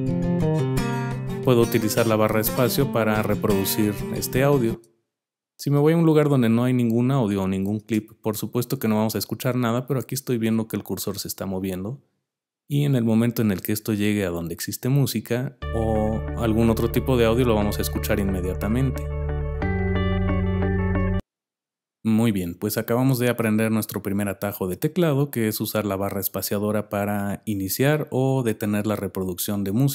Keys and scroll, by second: 4.6 space, 7.7 space, 21.1 space.